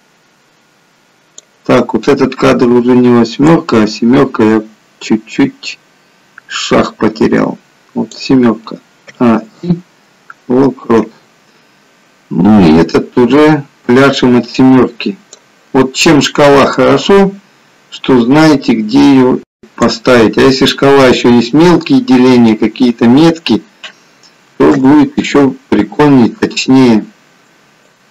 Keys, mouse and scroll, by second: 3.7 click, 9.2 a, 9.7 i, 12.8 click, 16.8 click, 24.4 a, 24.6 i, 28.0 click.